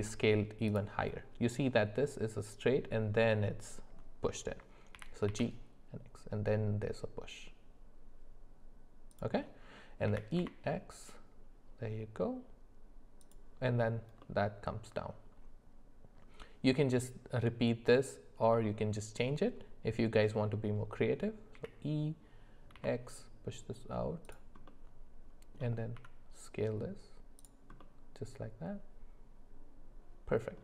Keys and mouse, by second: 4.9 g, 10.1 e, 14.2-16.9 middle drag, 18.5-20.7 middle drag, 21.5 e, 24.7 middle click, 25.9 s, 27.8-30.6 middle drag.